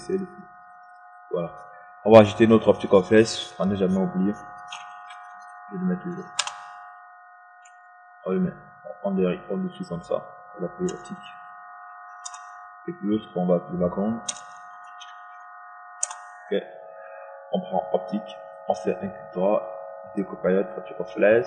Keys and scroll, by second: 6.7 ctrl+y, 8.4 Return, 12.7 Return, 16.6 shift+space, 18.0 Return.